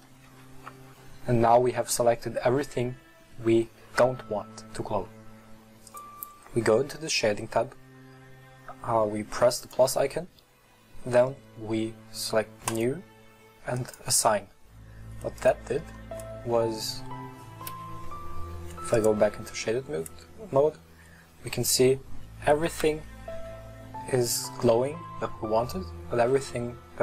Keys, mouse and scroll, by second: 0.3 ctrl+i, 8.7 click, 9.7-13.1 drag, 13.9-15.6 drag, 15.9 middle click, 16.6-17.0 scroll down 1, 17.0 middle click, 17.7 KP_1, 19.1 click, 19.7-21.1 scroll up 1, 21.1 Tab, 21.5-22.7 middle drag, 22.7 KP_1.